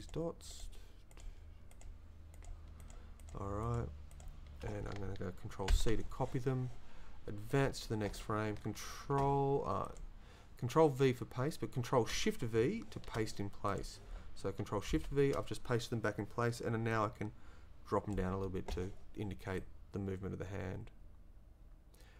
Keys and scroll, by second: 5.7 ctrl+c, 16.9 shift+v.